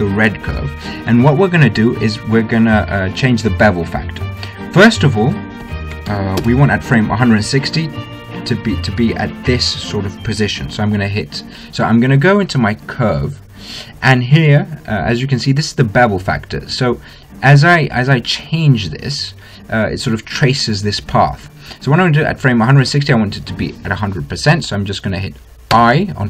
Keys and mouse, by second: 0.9-2.7 right drag, 5.5 right click, 5.8-7.5 drag, 7.5-13.6 middle drag, 13.6-15.1 drag, 15.5 middle click, 18.5-21.7 middle drag.